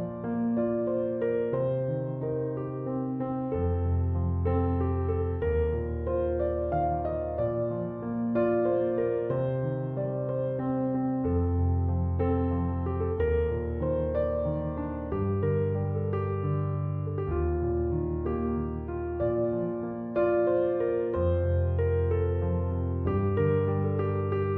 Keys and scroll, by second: 19.0-20.8 typing, 22.6 6, 22.8 0, 23.2 Return.